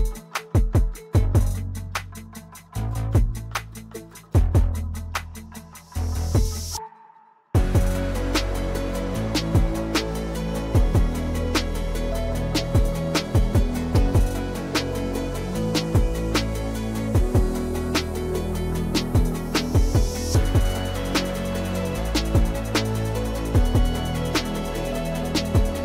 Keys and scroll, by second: 4.0 p, 5.7 ctrl+z, 8.1 p, 11.7 l, 15.5 \, 17.5 p, 23.1 F3, 24.2 F2, 24.7 F2.